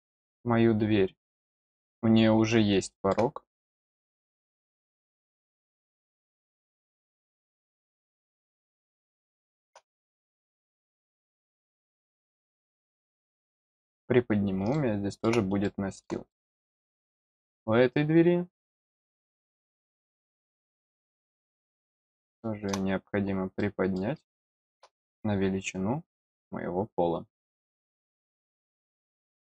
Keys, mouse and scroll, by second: 2.4 middle click, 4.6 click, 8.6 scroll down 1, 8.9 middle click, 10.0 scroll down 1, 10.4 scroll up 1, 12.1 click, 13.2-13.7 scroll down 2, 14.7 middle click, 15.6 middle click, 16.2 middle click, 16.7-17.8 scroll up 3, 19.4 click, 21.7-22.0 scroll down 1, 22.0 middle click, 23.2 scroll down 1, 23.5 middle click, 24.2 middle click, 25.1-27.0 scroll up 3, 27.4 click, 28.2-28.5 scroll down 2, 28.8 middle click.